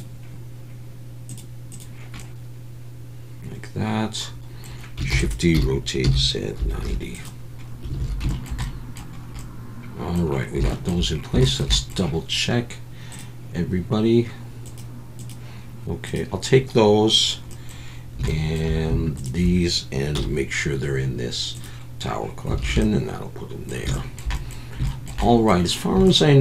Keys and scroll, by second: 5.1-6.8 typing, 8.0 alt+a, 20.1 m, 22.6 alt+a.